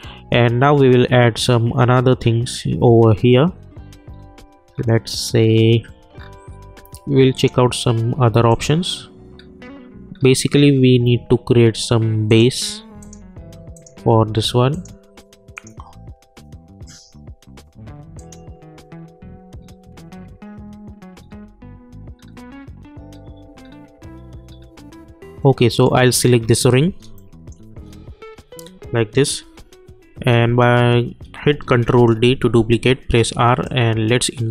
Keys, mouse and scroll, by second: 0.0 scroll up 1, 2.3-6.4 scroll down 1, 7.3 click, 9.3-10.7 scroll up 1, 10.7-11.8 scroll down 1, 12.3 click, 17.1 scroll down 1, 17.2-18.2 scroll up 1, 18.2 click, 19.6-21.2 scroll down 1, 25.8 click, 27.2-28.4 alt+middle drag, 28.4-29.4 scroll up 1, 29.4 r, 31.9 ctrl+d, 32.9 r, 33.6-34.5 drag.